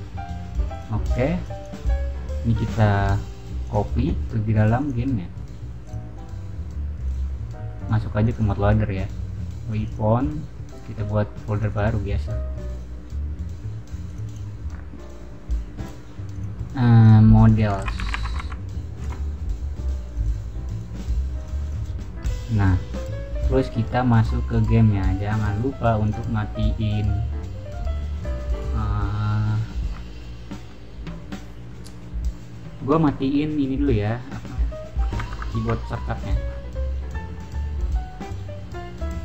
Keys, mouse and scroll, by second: 0.6 click, 1.1 click, 3.6 click, 4.7 right click, 5.8 click, 6.9 click, 8.2 click, 9.6 click, 9.8 click, 11.5 click, 11.6 click, 12.7 click, 14.0 click, 14.2 right drag, 16.3 click, 16.9 click, 17.7-18.8 typing, 18.9 Return, 20.0 click, 20.1 click, 20.6 right click, 21.3 click, 21.6 click, 22.8 click, 24.5 click, 26.0 click, 35.3 alt+Tab.